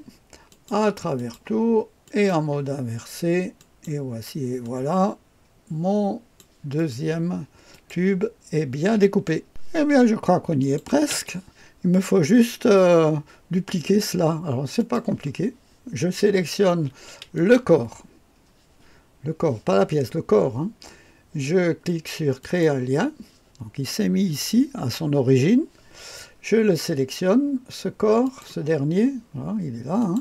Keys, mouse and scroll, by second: 0.5 click, 1.1 click, 2.0 click, 3.5 click, 4.6-6.4 drag, 6.7 click, 7.7 click, 10.6 click, 14.8 click, 17.3 click, 22.4 click, 26.9-28.2 scroll down 1, 28.2 click, 28.6-30.0 scroll down 1, 30.0 click.